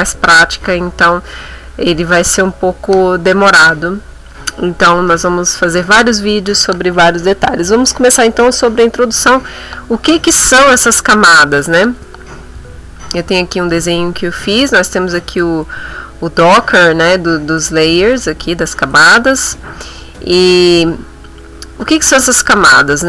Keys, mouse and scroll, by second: 14.8 click, 17.6 click, 18.9 click.